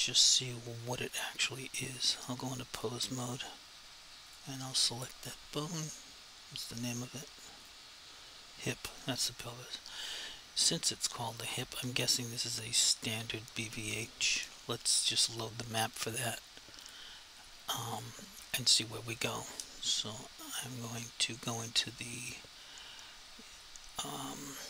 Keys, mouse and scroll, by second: 2.2 click, 7.6 click, 12.5 click, 16.9 click.